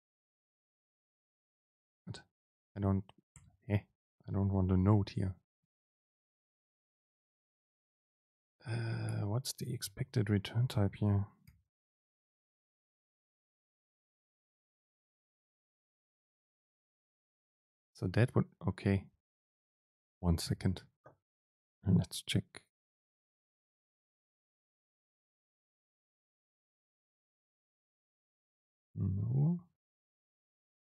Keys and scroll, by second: 5.3 ctrl+shift+super+t, 12.1 BackSpace, 12.2 super+space, 20.7 ctrl+alt+shift+s.